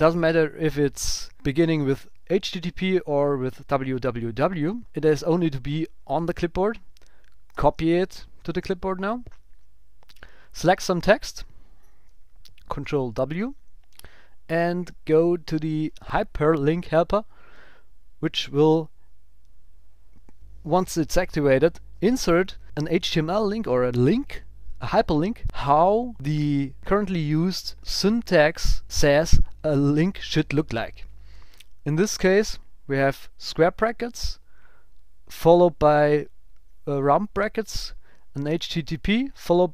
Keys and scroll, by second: 1.3 super+Left, 2.3 alt+shift+Right, 3.4 alt+Right, 4.5 super+Right, 4.8 shift+super+Left, 7.5 super+x.